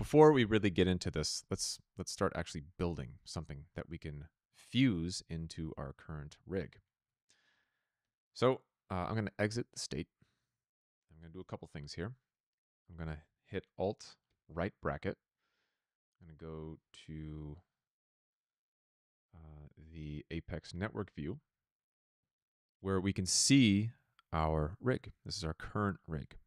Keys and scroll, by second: 6.8 ctrl+z, 14.2 alt+].